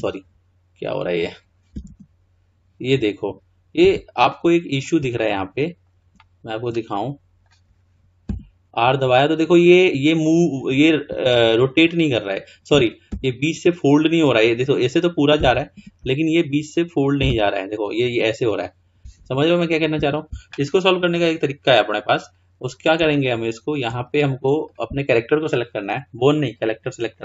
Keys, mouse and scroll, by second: 1.8 r, 4.4-8.3 middle drag, 8.3 r, 11.8-12.2 drag, 13.1 r, 16.8 click, 17.3 r, 20.8-22.3 middle drag, 22.3-23.2 scroll up 2, 23.2-24.7 shift+middle drag, 24.7 click, 26.6 click.